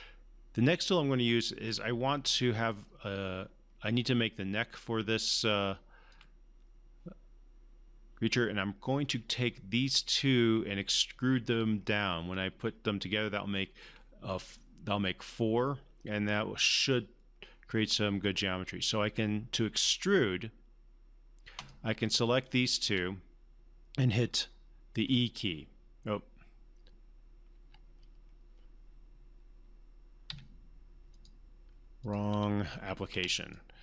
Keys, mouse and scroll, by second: 4.0-6.1 alt+drag, 11.6 alt+click, 12.3-13.9 alt+drag, 16.9-18.7 scroll down 1, 21.6 click, 22.7 shift+click, 25.0 e, 27.5 ctrl+e, 30.3 Escape, 31.2 click.